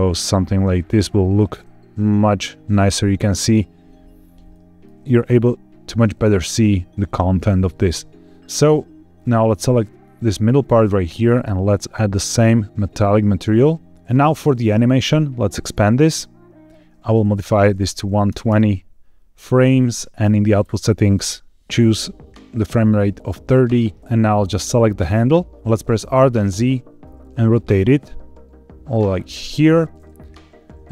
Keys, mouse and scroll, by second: 2.8 click, 4.4 shift+middle click, 5.1-5.8 scroll up 1, 7.4 scroll down 1, 9.1 click, 9.5 click, 10.1 click, 11.2-13.1 drag, 13.9-15.0 scroll up 1, 15.0 click, 16.1 click, 17.3-18.4 drag, 20.1 click, 21.0-23.1 drag, 24.3 click, 24.5 click, 25.5 n, 25.9 r, 26.2 z, 29.3 click.